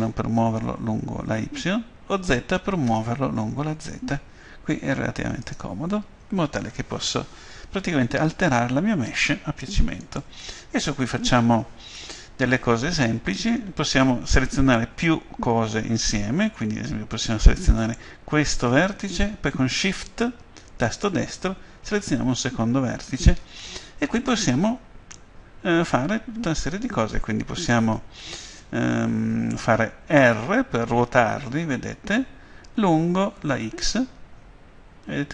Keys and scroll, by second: 2.2 z, 30.2 r, 33.6 x.